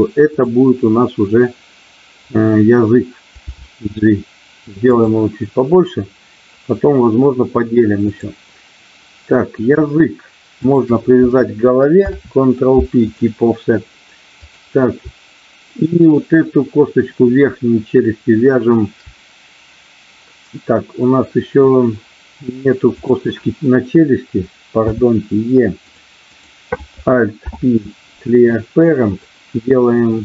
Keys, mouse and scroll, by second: 0.3 click, 3.6 g, 4.9 click, 10.6 shift+click, 12.1 ctrl+p, 14.4 click, 22.8 click, 24.9 e, 25.8 click, 26.3 click, 27.4 alt+p.